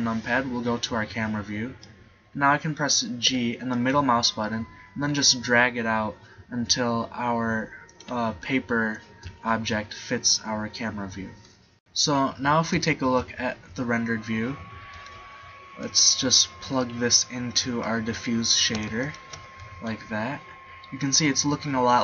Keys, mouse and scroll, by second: 3.5 g, 13.1 shift+z, 14.2 middle click, 15.8-16.8 drag, 16.8-17.8 middle drag.